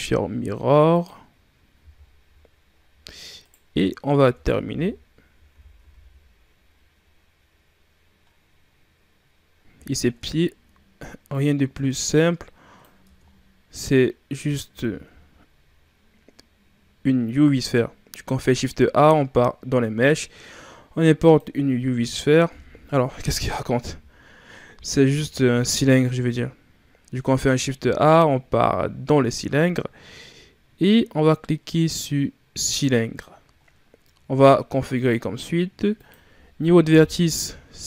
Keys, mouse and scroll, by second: 0.9 click, 1.7 a, 1.9 scroll down 6, 2.6-3.2 scroll up 7, 3.2 right click, 4.1 Tab, 4.5 a, 4.6 a, 5.4 r, 9.8 ctrl+scroll up 3, 10.1 Tab, 11.2-12.9 drag, 12.9 Tab, 13.1-14.0 scroll down 4, 14.0-14.7 scroll up 3, 14.7 shift+a, 23.9 Delete, 25.3 shift+a, 25.7 shift+a, 27.6 shift+a, 33.5 scroll down 2, 34.8-37.8 drag.